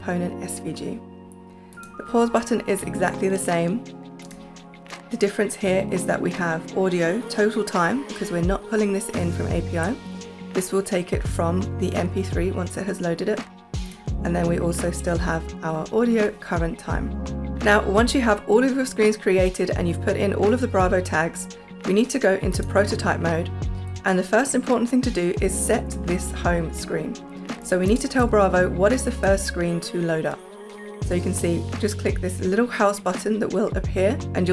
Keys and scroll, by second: 28.0 space.